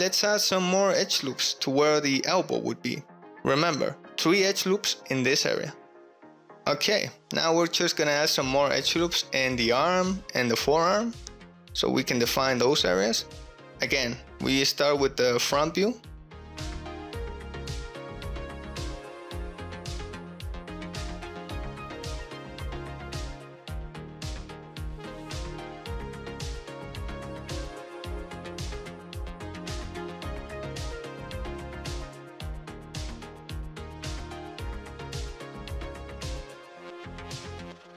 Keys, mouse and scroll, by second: 0.3 click, 0.6 alt+z, 1.1 alt+z, 1.4 ctrl+r, 2.2 click, 2.8 s, 2.9 x, 3.1 0, 3.2 Return, 3.8 ctrl+b, 5.0 click, 6.0 shift+click, 6.5 ctrl+click, 6.8 ctrl+r, 11.9 shift+click, 12.2 ctrl+r, 13.5 ctrl+z, 14.2 ctrl+r, 15.7 click, 16.0 alt+z, 16.7 click, 16.9 alt+z, 17.3 1, 18.2 click, 18.8 alt+z, 19.6 alt+z, 19.6-37.9 typing, 20.0 alt+z, 20.2 alt+z, 20.7 click, 21.3 alt+z, 21.3 click, 21.4 alt+z, 22.0 alt+z, 22.4 alt+z, 22.6 click, 22.7 alt+z, 22.9 click, 23.0 alt+z, 23.3 alt+z, 24.3 shift+click, 25.2 click, 26.6 click, 27.7 shift+click, 27.9 alt+z, 28.2 alt+z, 29.2 click, 30.9 alt+z, 30.9 click, 32.8 click, 33.8 alt+z, 35.2 click, 36.2 click, 36.6 ctrl+click.